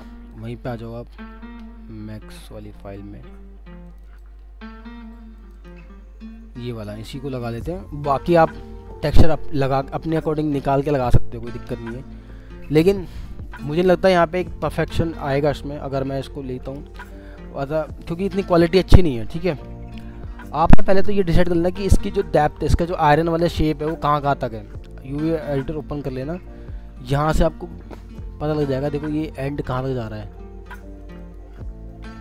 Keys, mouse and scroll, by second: 2.8 double click, 20.3-20.7 alt+scroll up 1, 20.7 alt+middle click, 21.9 scroll up 1, 22.5 alt+middle click, 23.7 alt+middle click, 26.9-27.3 scroll up 1, 27.3 middle click, 27.7 scroll up 1, 31.0 ctrl+click, 31.9 alt+middle click.